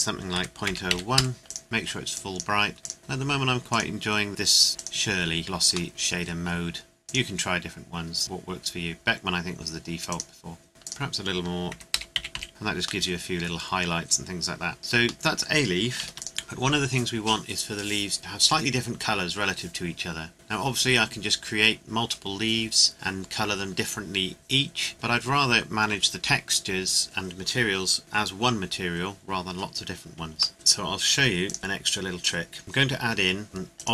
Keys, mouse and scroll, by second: 0.3 KP_Decimal, 0.6 KP_0, 0.9 KP_1, 1.2 KP_Enter, 1.4 click, 2.7-3.0 scroll up 2, 2.8 click, 3.7 click, 5.4-5.9 scroll down 1, 5.9 shift+middle click, 6.2-7.0 scroll up 1, 7.0 click, 10.1 click, 10.8 click, 11.7 KP_Decimal, 11.9 KP_0, 12.1 KP_2, 12.3 KP_5, 12.5 KP_Enter, 13.0 middle click, 14.8 scroll down 1, 15.1 middle click, 16.0 ctrl+s, 16.2 click, 16.3 scroll down 1, 25.4 scroll down 1, 29.6 scroll down 1, 30.5-31.2 scroll up 1, 31.4 click, 33.8 click.